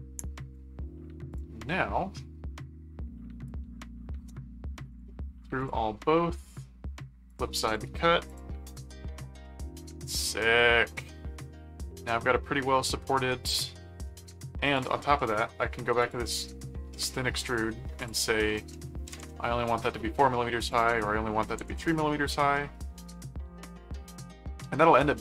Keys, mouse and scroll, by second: 1.3 click, 4.9 click, 5.6 click, 6.1 middle click, 7.3 click, 8.5 click, 9.4-12.2 middle drag, 12.6-14.1 middle drag, 14.7 click, 16.0 click, 17.1 middle click, 18.0 click, 20.7 click, 22.5-24.3 middle drag, 25.1 middle click.